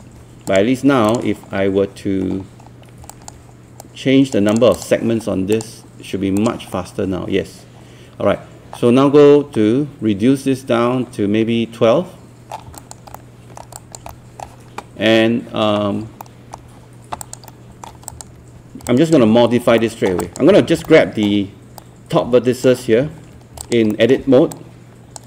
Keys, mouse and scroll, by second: 1.5-2.3 scroll up 1, 2.3-2.7 scroll up 1, 3.1 alt+click, 3.8 right click, 4.5 click, 6.7-12.7 middle drag, 12.8 alt+click, 13.1 alt+scroll up 1, 13.3 typing, 14.1 alt+middle click, 16.3 alt+middle click, 17.2 alt+click, 17.5 alt+middle click, 18.1 click, 19.0 alt+click, 19.8 alt+middle click, 20.5 scroll up 1, 20.9 alt+middle click, 21.8 right click, 23.6 alt+click, 23.9 alt+middle click, 24.5 click.